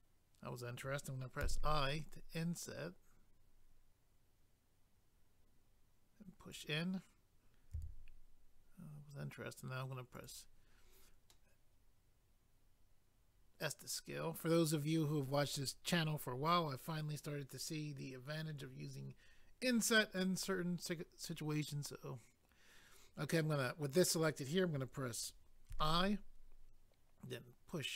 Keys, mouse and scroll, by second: 6.5 click, 6.6 click, 7.7 s, 10.1 click, 10.2 click, 11.3 middle click, 21.5-22.8 scroll up 1.